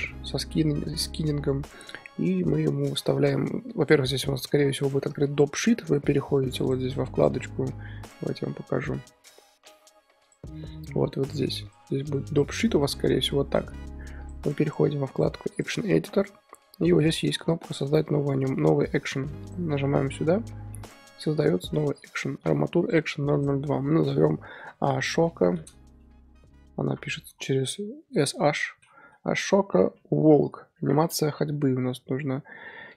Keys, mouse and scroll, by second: 19.5-20.7 drag, 20.7-21.7 middle drag, 21.7-31.2 drag.